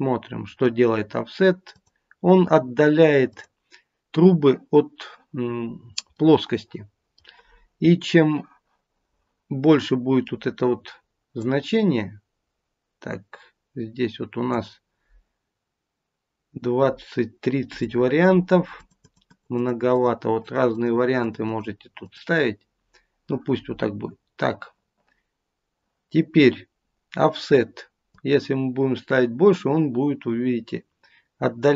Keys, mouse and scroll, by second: 0.5 click, 1.6 click, 3.2 click, 6.1 middle click, 7.0 middle click, 11.3 click, 17.6 click, 18.7 click, 19.3 click, 19.9 click, 20.4 click, 20.7 click, 21.2 click, 21.8 click, 28.0 click.